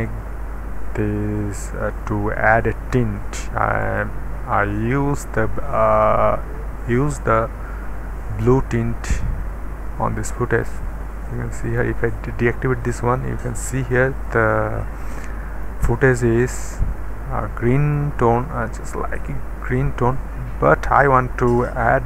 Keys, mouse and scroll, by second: 0.2-1.7 middle drag, 1.6-3.8 scroll up 1, 3.8 click, 9.4-11.3 middle drag, 11.7 click, 11.9 click, 11.9 d, 13.2-16.3 middle drag, 18.0 middle click, 19.0 middle click, 19.3-21.8 scroll up 1.